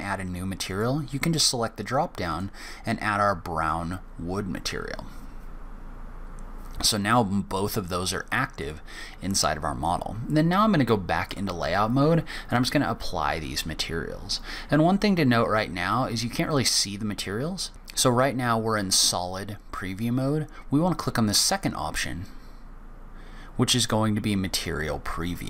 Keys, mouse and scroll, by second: 0.5 click, 8.4 click, 11.1 click, 12.2 click, 21.0 click, 25.2 click.